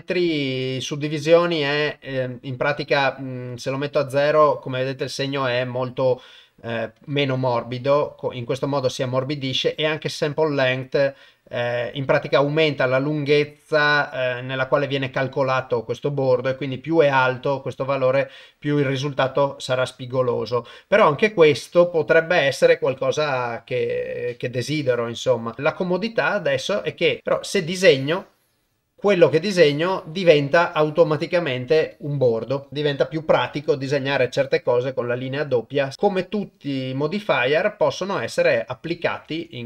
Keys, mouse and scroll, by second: 1.7-3.0 drag, 7.0 click, 9.9-15.2 drag, 17.3-20.8 drag, 21.9-24.1 drag, 24.9 click, 25.5 click, 27.9 click, 29.6 click, 30.7 click, 31.9 click, 32.6 click, 39.2 ctrl+Tab.